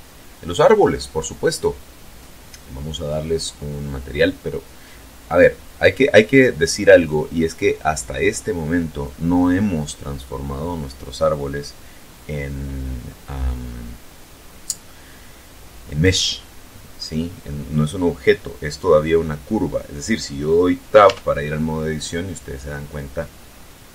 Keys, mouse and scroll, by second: 20.8 Tab, 23.0-23.9 middle drag.